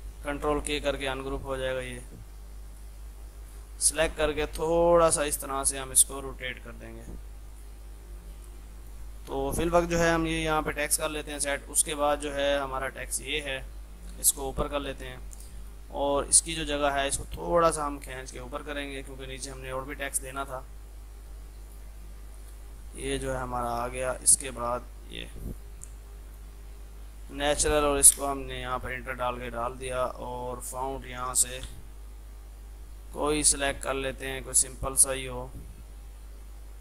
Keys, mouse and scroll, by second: 0.4 ctrl+k, 1.0 click, 1.9 ctrl+z, 2.8-7.6 drag, 8.0 F3, 8.5-11.3 drag, 10.9-11.9 typing, 11.4-14.1 drag, 14.1 shift+Page_Up, 15.7 click, 18.3 Up, 21.7 ctrl+click, 24.3 Left, 25.6 click, 26.0 F2, 26.1 click, 27.0-27.8 typing, 29.5 click, 33.6 scroll down 1.